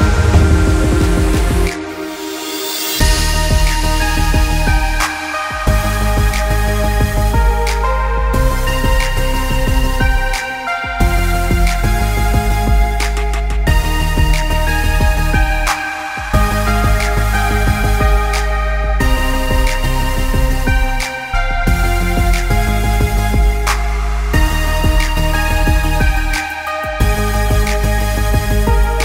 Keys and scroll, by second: 3.3 ctrl+-, 3.6 ctrl+=, 8.2 ctrl+z, 17.3 ctrl+z.